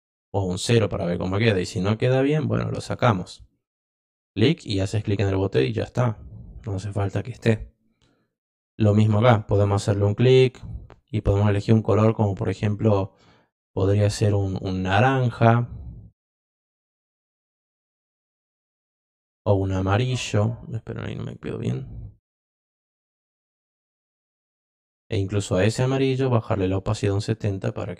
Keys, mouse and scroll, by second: 0.3 click, 1.3 click, 4.5 click, 8.8 click, 10.5 click, 11.0 click, 11.4 click, 11.8 click, 12.2 click, 13.5 click, 15.1-17.1 drag, 17.8-18.4 drag, 19.3 click, 21.1 click, 22.2-22.5 drag, 24.7 click, 25.5 click, 26.8 click.